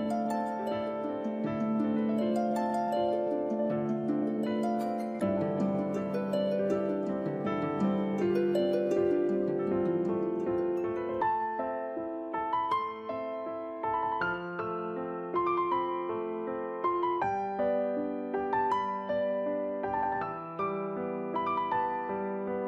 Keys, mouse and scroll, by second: 1.9 click, 3.0 click, 5.8 middle click, 10.7 middle click, 12.0 a, 12.7 middle click, 14.1 scroll down 1, 22.1 click.